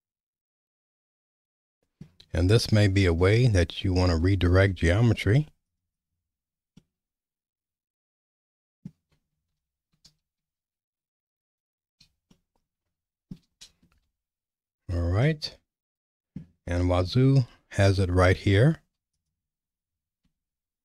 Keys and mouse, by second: 2.5 shift+middle click, 4.4 ctrl+r, 5.9 click, 6.8-8.9 middle drag, 9.5 ctrl+z, 10.1 ctrl+z, 10.6 ctrl+z, 11.0 ctrl+z, 11.3 ctrl+z, 12.3-13.3 shift+middle drag, 15.2-16.4 middle drag, 17.0 Tab, 20.2 Tab.